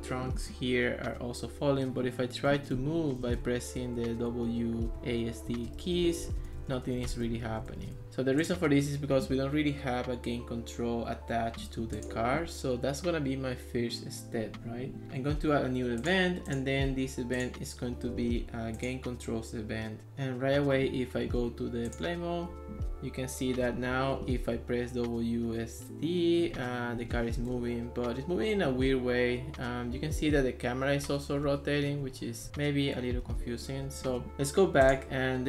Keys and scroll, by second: 2.3-8.3 typing, 23.4-24.6 typing, 26.6 d, 27.1 a, 27.6 d, 30.1 w, 32.6 d, 33.8 s.